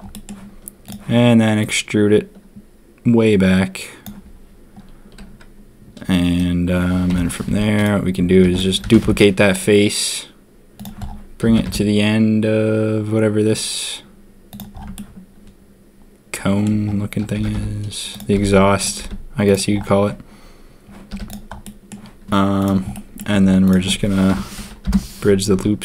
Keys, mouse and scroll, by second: 0.1 click, 1.6-4.0 drag, 7.0 ctrl+KP_3, 7.4 z, 8.4 shift+d, 8.8 g, 11.5 g, 15.0 shift+middle click, 15.3-16.4 shift+middle drag, 17.3-19.0 typing, 21.0 z, 21.6 middle click, 22.6 click, 22.9 middle click, 23.6 alt+shift+click, 24.2 F3, 25.5 z.